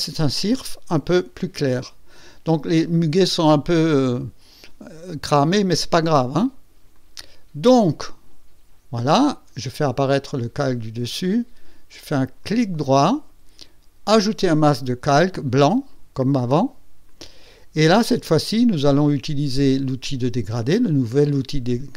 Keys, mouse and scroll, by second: 6.9 click, 9.2 click, 12.4 right click, 14.0 click, 17.0 click, 21.3 click.